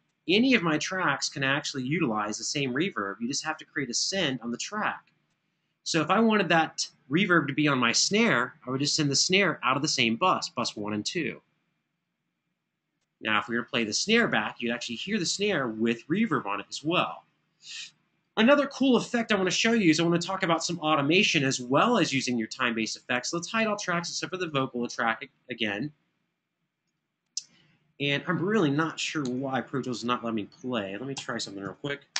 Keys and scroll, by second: 29.0 super+s, 31.8 super+w.